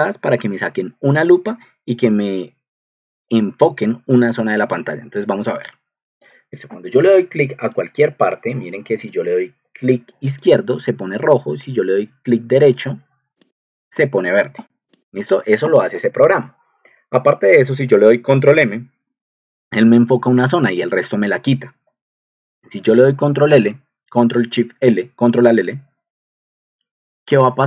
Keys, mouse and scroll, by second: 10.8 click, 12.8 right drag, 12.9 click, 17.9 ctrl+alt+m, 19.8 ctrl+alt+m, 22.4 ctrl+alt+l.